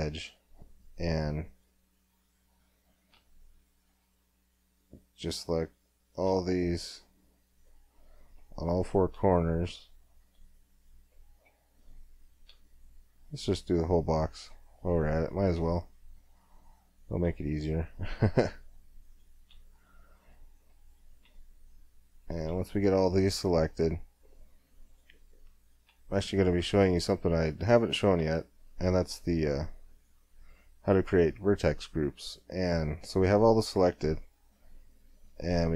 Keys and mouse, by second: 0.8 middle click, 1.5-3.4 drag, 3.4 middle click, 4.0 middle click, 5.3-6.5 middle drag, 10.6 middle click, 14.0 middle click, 15.7 middle click, 16.6 middle click, 20.3-21.3 middle drag, 24.1 middle click, 24.9-26.5 drag, 26.5 middle click, 27.4 middle click, 30.0-35.7 drag.